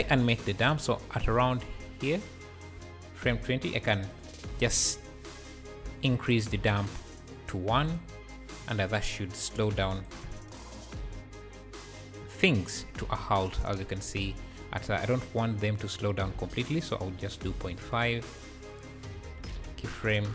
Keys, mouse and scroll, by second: 1.1-4.1 shift+right drag, 4.1 click, 4.8 Right, 5.3-6.3 drag, 7.9 click, 9.9 shift+right click, 10.2 space, 12.3 space, 13.5 Down, 15.8-18.1 drag.